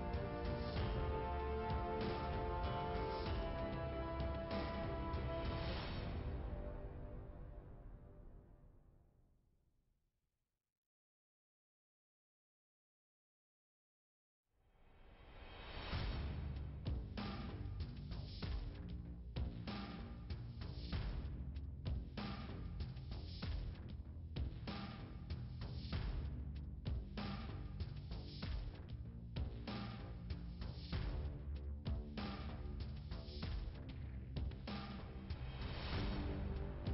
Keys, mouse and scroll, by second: 0.1 typing, 0.7 Return, 2.6 scroll down 2, 3.8 click, 4.8 typing, 5.1 Return, 5.3 Return, 7.3 click, 8.3 click, 11.4 click, 13.3 click, 16.3 click, 17.7 click, 18.9 click, 20.5 click, 21.8 click, 24.9 click, 26.6 click, 29.2 click, 31.2 click, 32.3 click, 33.4 click, 35.0 click, 36.8 click.